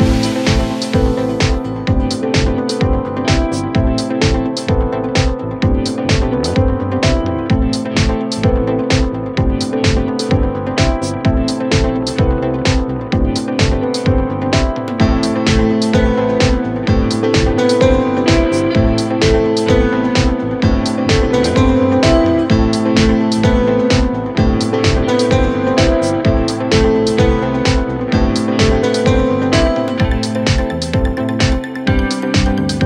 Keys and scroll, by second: 3.8 F3, 28.5 shift+Page_Up.